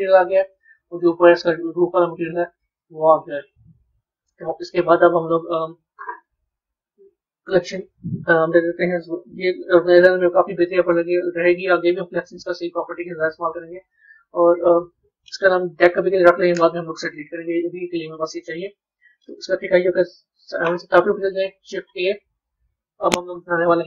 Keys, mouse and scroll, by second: 1.8-4.8 middle drag, 4.8 z, 7.3 click, 7.6-10.7 drag, 12.3 click, 13.3-14.2 right drag, 14.2 click, 14.4-17.6 drag, 19.1-19.8 middle drag, 19.8 KP_7, 21.4 shift+a.